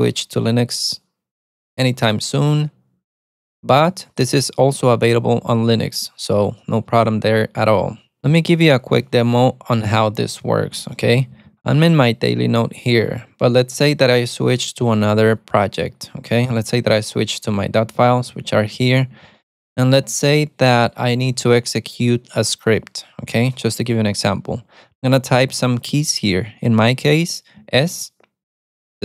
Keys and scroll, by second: 10.6-12.5 typing, 17.0-20.1 typing.